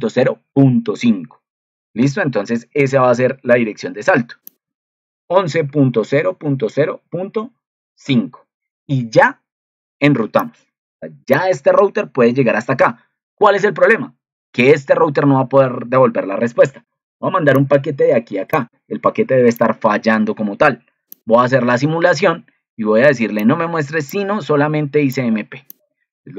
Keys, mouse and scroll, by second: 24.0 click.